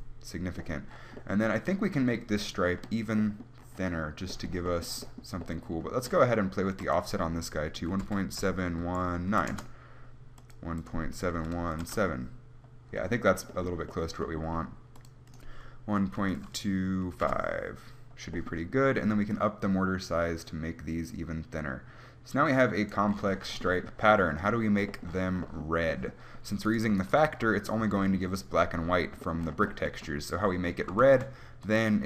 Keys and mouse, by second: 11.7-17.0 drag, 19.7-22.1 drag, 26.9-28.1 drag, 27.5 g, 28.1 a, 31.3 shift+a.